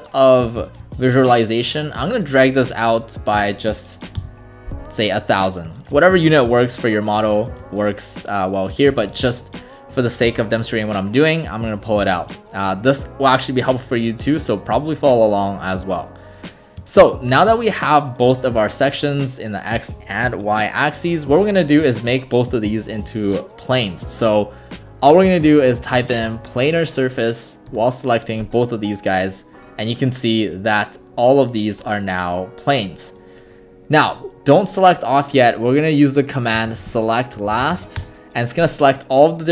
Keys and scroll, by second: 4.2 Return, 25.7-26.8 typing, 27.7 Return, 36.3-38.2 typing.